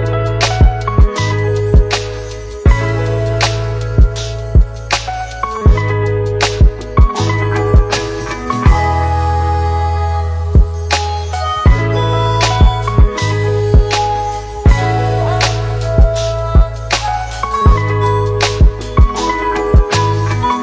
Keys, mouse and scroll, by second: 2.3-2.8 click, 6.6 z, 6.7-8.2 click, 18.5-20.6 click.